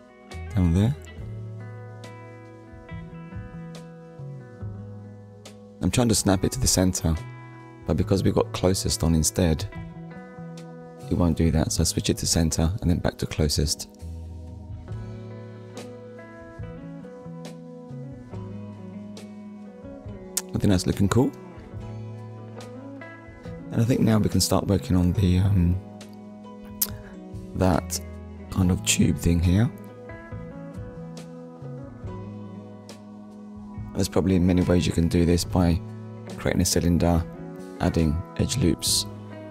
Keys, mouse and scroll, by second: 0.2-0.6 scroll up 1, 1.9 click, 2.6 ctrl+click, 5.6 click, 7.1 click, 8.6 click, 8.9 ctrl+click, 11.0 click, 11.8 click, 12.5 click, 12.9-13.6 scroll down 3, 13.8 shift+middle click, 14.5-14.9 scroll down 2, 14.9 shift+middle click, 15.3 middle click, 16.7 ctrl+s, 21.5 click, 25.6 middle click, 26.7 KP_1, 27.5 scroll up 1, 30.3 shift+middle click, 31.2-31.6 scroll up 1, 31.8 shift+middle click.